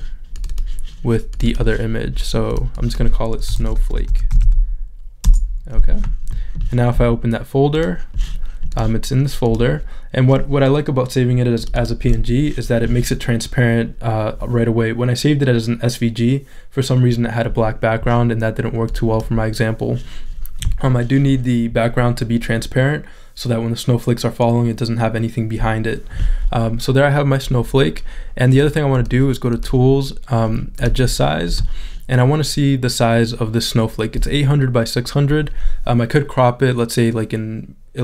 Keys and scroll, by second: 3.5 s, 6.3 Return.